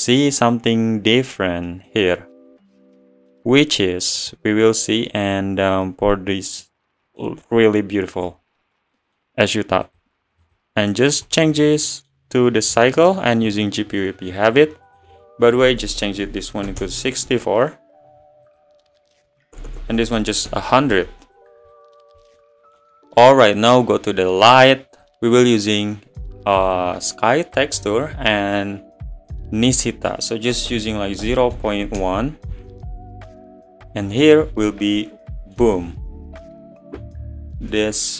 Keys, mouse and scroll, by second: 4.4 click, 8.1-9.0 drag, 9.0-11.2 middle drag, 11.2-11.8 drag, 11.8-13.5 middle drag, 13.5-13.9 drag, 13.9-16.8 middle drag, 16.8 BackSpace, 20.5 0, 21.7-24.9 middle drag, 27.6-32.0 drag, 32.0 BackSpace, 33.9 click, 34.7-37.9 middle drag, 37.9 click.